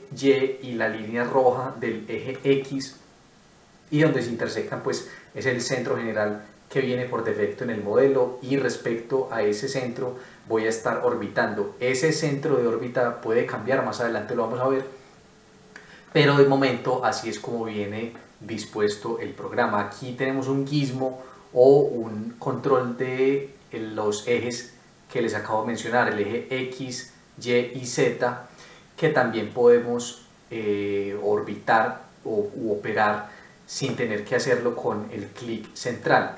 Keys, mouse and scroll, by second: 4.6 middle click, 35.2 middle click.